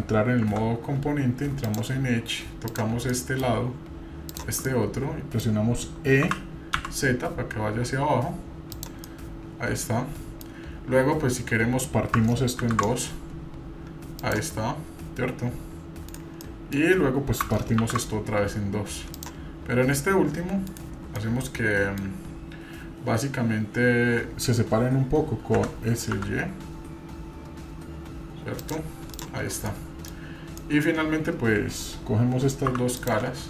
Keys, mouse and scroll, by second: 1.6 click, 2.7 click, 3.1 middle click, 4.3 shift+click, 4.7 middle click, 6.2 e, 9.1-10.4 middle drag, 16.4 middle click, 17.8 ctrl+r, 21.1-22.0 middle drag, 22.5-24.2 scroll up 1, 29.1 click, 29.7-30.1 middle drag, 30.6 middle click, 32.7 3, 33.0 click.